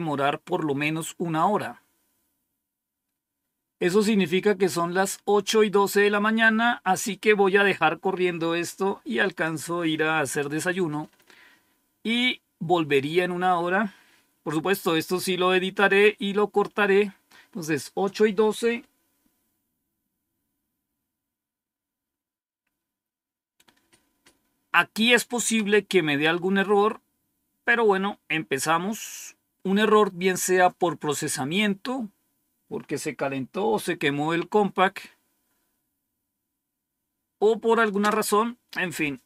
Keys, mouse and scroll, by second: 9.2 click, 9.8 click, 37.9 Return.